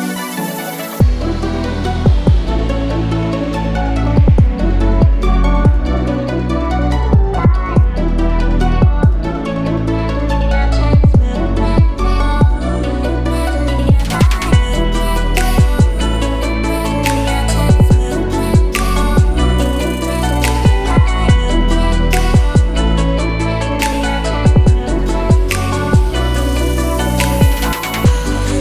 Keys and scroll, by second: 0.7 0, 1.2 shift+5, 1.7 shift+Return, 2.3 Return, 22.7-24.3 typing, 25.0 Return.